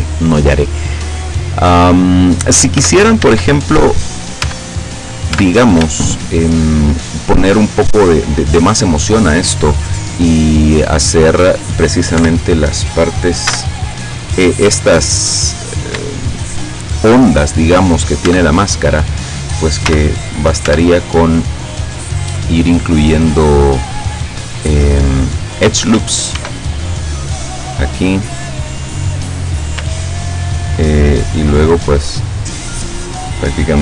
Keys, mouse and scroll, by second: 2.8 Tab, 4.1 right click, 4.5 Tab, 5.0 right click, 5.3 Tab, 6.0-7.1 shift+middle drag, 12.3 KP_7, 13.5 z, 15.7-16.1 scroll up 2, 16.2 shift+middle click, 18.3 Tab, 19.9 z, 20.7 Tab, 26.4 ctrl+r, 27.2 click, 28.1 click, 28.6 middle click, 31.5-32.7 middle drag, 33.7-33.8 drag.